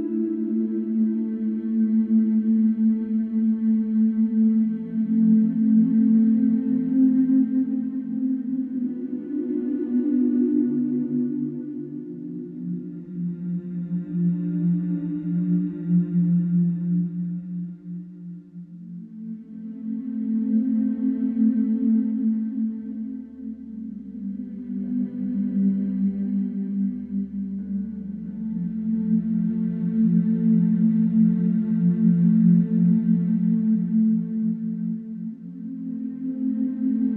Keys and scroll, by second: 4.5 F1, 9.1 3, 10.5 4, 11.9 Return, 12.1 0, 12.5 Return, 14.6 2, 24.8 4, 26.8 3, 28.9 4, 29.9 3, 35.0 4.